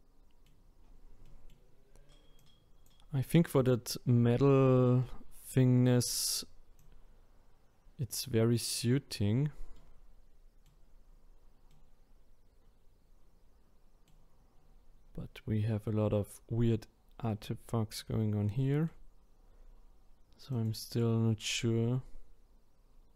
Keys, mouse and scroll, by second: 0.4-1.2 scroll down 8, 1.2-2.4 middle drag, 2.4 click, 3.5 click, 4.2-5.0 scroll up 2, 5.0-5.9 middle drag, 5.9-6.4 scroll down 6, 6.8 click, 9.1-9.7 scroll up 2, 9.7-11.0 middle drag, 11.0-11.7 scroll up 3, 11.7-14.6 middle drag, 14.6-15.8 scroll up 1, 15.8-17.3 scroll up 1, 17.3-20.5 middle drag, 20.5 click, 21.6-23.1 middle drag.